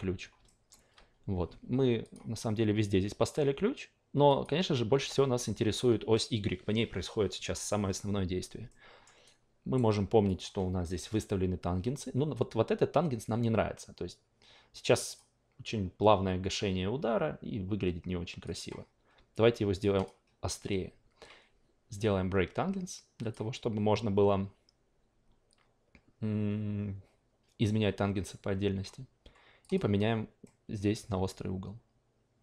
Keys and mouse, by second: 0.5 alt+middle click, 0.9 a, 2.0 click, 4.3 click, 5.3-9.2 alt+middle drag, 9.2-10.2 alt+right drag, 10.2 drag, 15.0 click, 18.4 click, 19.8-29.7 drag, 30.4-32.4 middle drag.